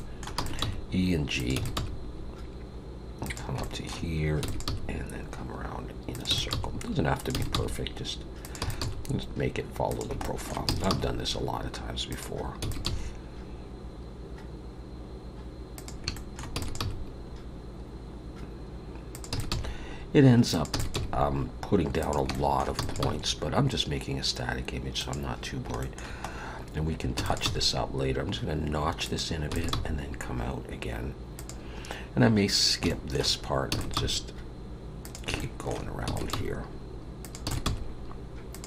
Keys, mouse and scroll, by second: 35.9 e, 35.9 g, 36.0 e, 36.3 g, 37.4 e, 37.6 g.